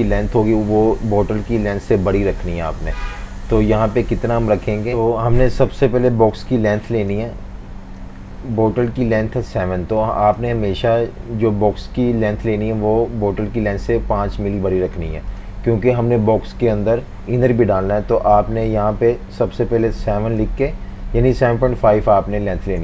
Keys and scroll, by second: 21.0-22.3 typing, 22.6 Return.